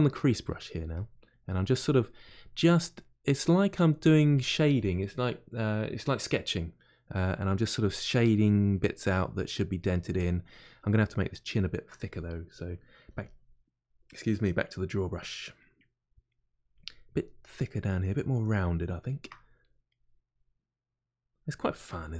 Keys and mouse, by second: 2.7 middle click, 3.6-7.8 drag, 7.8 middle click, 8.2 click, 8.7 middle click, 9.1 click, 9.5 middle click, 9.9 click, 10.4-12.1 middle drag, 12.1 click, 12.5 middle click, 13.0 f, 14.4 middle click, 14.8 click, 15.6-16.7 middle drag, 16.7 click, 17.4-18.6 middle drag, 18.6 shift+click, 19.3-22.1 middle drag.